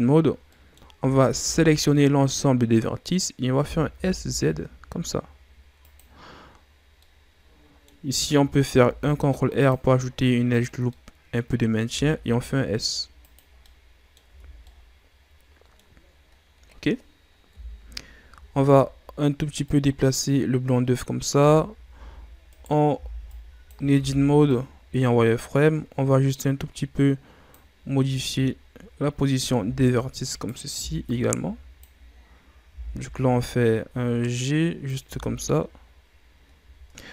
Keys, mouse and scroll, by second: 0.5 middle click, 0.9 a, 1.3 a, 1.9-3.6 middle drag, 3.6 s, 6.5-7.0 scroll up 1, 7.0-8.7 middle drag, 8.7 ctrl+r, 10.9-11.9 middle drag, 11.9 s, 13.5 scroll down 2, 13.6 middle click, 14.2 Tab, 14.6-17.5 middle drag, 17.5 KP_7, 18.4-19.6 shift+scroll up 4, 19.6-21.3 drag, 21.3 Tab, 21.9 z, 22.4 right click, 22.9 b, 23.9 z, 24.4-27.5 drag, 28.1-29.5 ctrl+scroll down 2, 29.5 z, 30.2 right click, 30.7 b, 32.7 g, 35.0 z, 36.8 middle click, 36.9 Tab.